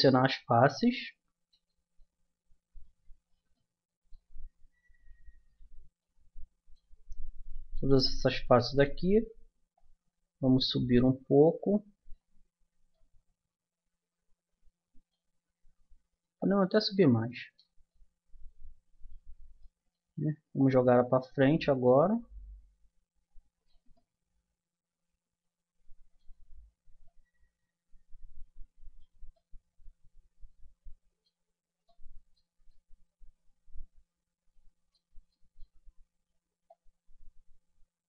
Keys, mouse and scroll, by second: 1.9-3.7 middle drag, 3.9-5.4 middle drag, 5.4 click, 6.0-7.9 middle drag, 7.9 click, 8.0 middle click, 8.2-9.7 drag, 9.7-10.7 middle drag, 10.7 click, 12.9-14.5 drag, 14.5 middle click, 16.4-17.9 drag, 17.9 middle click, 20.6-22.2 drag, 23.9-34.6 middle drag, 35.2-36.6 middle drag, 36.6-38.0 drag.